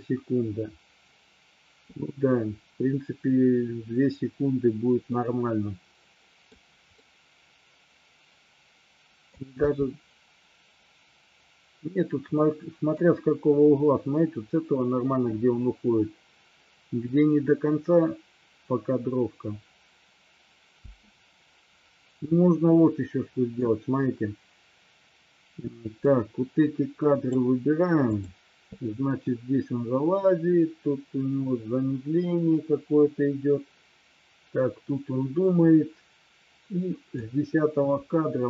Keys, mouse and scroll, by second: 5.2-6.6 middle drag, 7.0-9.4 middle drag, 9.6 space, 12.5-13.0 middle drag, 20.9 space, 22.9 middle click, 26.1-27.4 drag, 28.2 click, 29.4-37.4 drag.